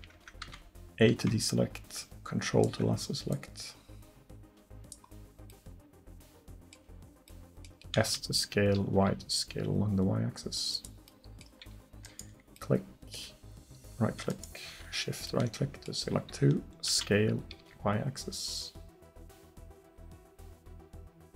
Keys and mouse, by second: 0.5 a, 5.7-7.3 drag, 8.1 s, 14.3-15.3 right drag, 16.9 s.